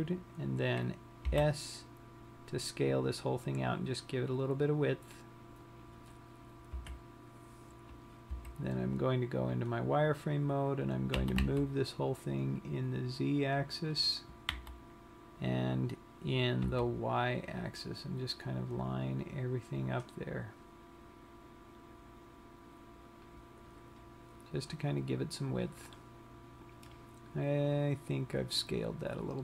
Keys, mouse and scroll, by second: 6.2 click, 7.2 KP_3, 9.0 z, 10.3-12.1 scroll up 7, 12.1 g, 14.5 click, 15.1 g, 23.8 click, 24.5 scroll down 1.